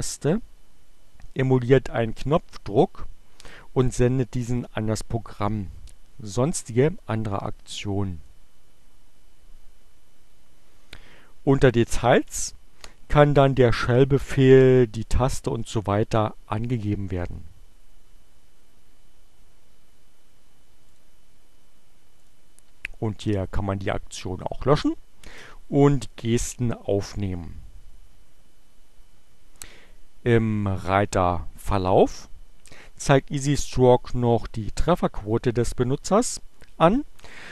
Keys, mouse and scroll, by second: 20.1 click, 22.3 click, 30.5 click.